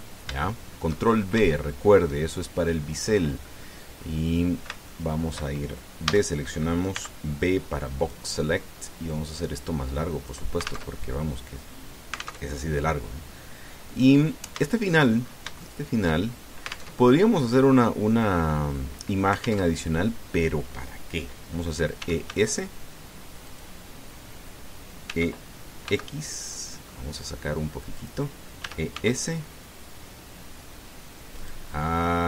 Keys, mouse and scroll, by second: 1.2 shift+middle click, 1.9-2.2 shift+scroll up 2, 2.3 shift+middle click, 3.4 scroll down 2, 4.0 scroll up 2, 4.7 scroll down 2, 5.7 shift+click, 6.8 a, 7.7 b, 8.2 click, 9.9-11.3 drag, 11.7 alt+Tab, 13.2 alt+Tab, 14.6-16.0 drag, 16.0 shift+scroll up 1, 16.4 shift+middle click, 17.1 shift+scroll up 1, 17.7 alt+Tab, 20.4 alt+Tab, 22.8 e, 23.0 s, 24.3 click, 25.9 e, 26.6 x, 28.7 click, 29.4 e, 29.7 s, 32.1 click.